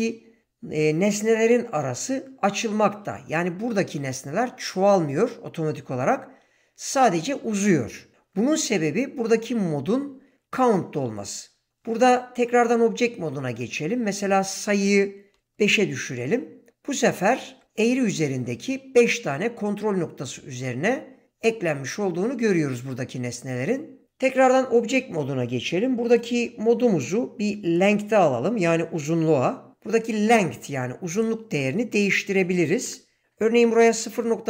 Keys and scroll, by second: 12.4 Tab, 15.3 5, 15.6 Return, 17.5 Tab, 24.3 Tab, 32.8 ., 33.9 4.